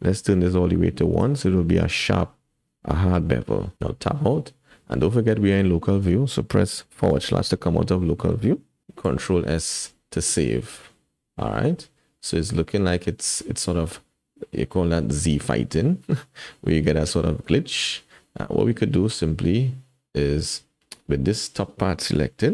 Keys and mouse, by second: 3.7 Tab, 7.1 /, 9.1 ctrl+s, 10.0-12.2 drag, 12.2-13.7 middle drag, 14.8-16.7 middle drag, 15.0-16.7 drag, 17.5 Tab.